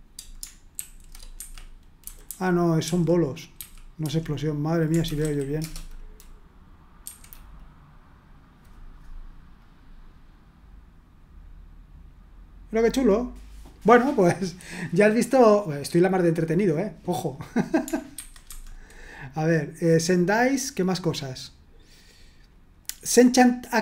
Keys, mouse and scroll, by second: 0.8 ctrl+v, 1.4 Escape, 2.0-5.7 typing, 7.0 F5, 9.6 click, 18.1 super+1, 18.5 super+2, 20.6-21.6 scroll down 1, 22.8 click.